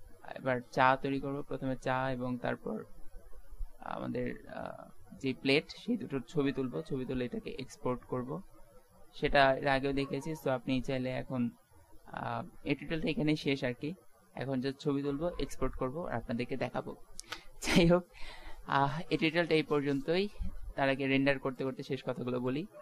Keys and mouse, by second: 0.2-3.0 middle drag, 3.1 middle click, 7.3-8.6 middle drag, 9.2-10.8 middle drag, 11.6 shift+z, 21.8-22.8 drag.